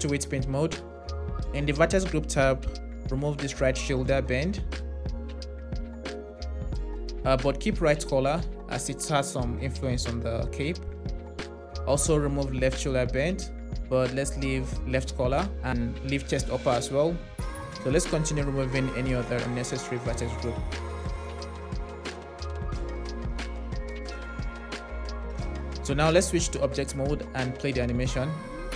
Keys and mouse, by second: 5.0 click, 11.4 click, 12.6 click, 14.9 click, 16.8 click, 18.2 click, 19.4 click, 21.9 click, 22.7 click, 26.4 Tab, 27.3 space.